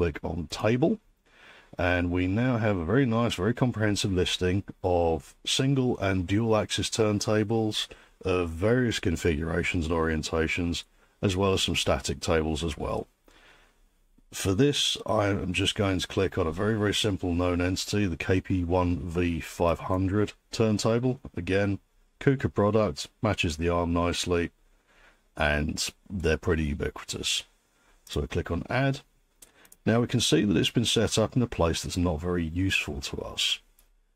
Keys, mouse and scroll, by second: 0.7 click, 20.0 click, 28.2 click, 29.7 click.